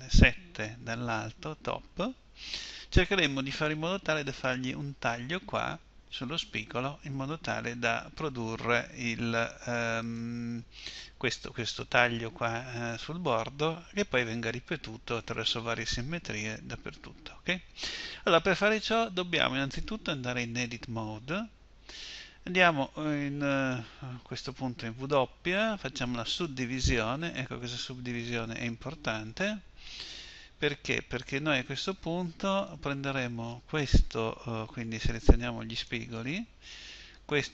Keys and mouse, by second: 1.1 KP_7, 19.1-20.5 middle drag, 20.5 Tab, 25.0 w, 30.8 KP_1.